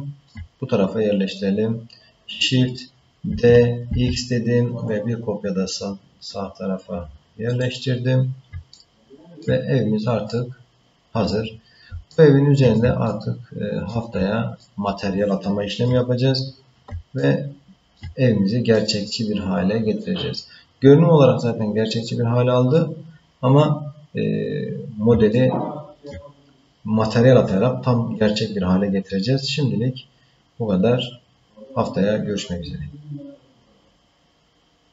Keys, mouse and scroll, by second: 3.4 shift+d, 8.7 ctrl+middle click, 9.8-10.3 scroll down 1, 10.3 middle click, 12.1 shift+middle click, 13.0 ctrl+middle click, 14.6-15.8 shift+middle drag, 17.2 shift+middle click, 18.7-22.8 middle drag, 24.1 scroll down 1, 25.3 ctrl+middle click.